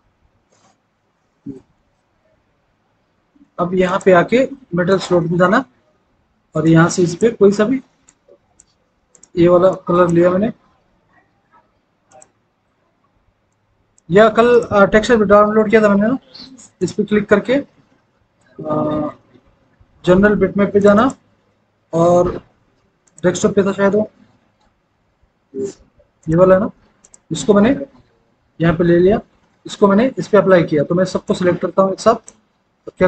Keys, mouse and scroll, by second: 19.2 scroll down 1, 20.9 click, 27.1 click.